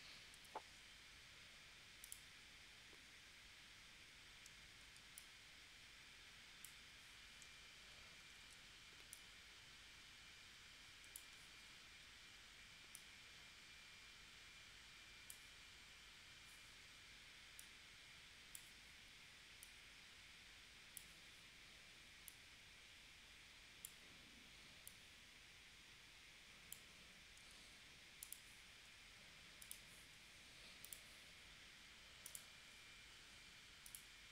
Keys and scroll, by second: 0.3 p, 4.9 a, 8.4 shift+c, 27.4 a.